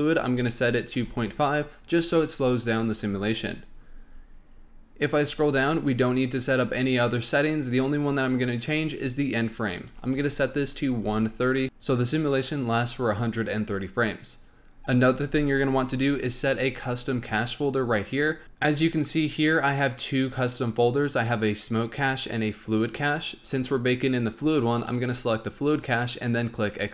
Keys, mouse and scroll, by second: 3.7-6.9 scroll down 7, 6.9-7.5 scroll down 3, 8.5-11.5 drag.